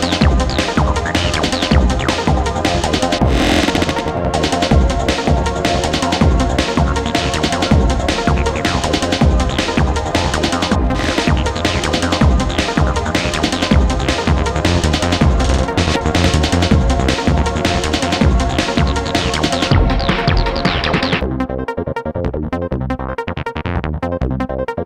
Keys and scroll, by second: 0.3 Delete, 15.1 ], 17.6 ], 20.2 ], 24.4 4.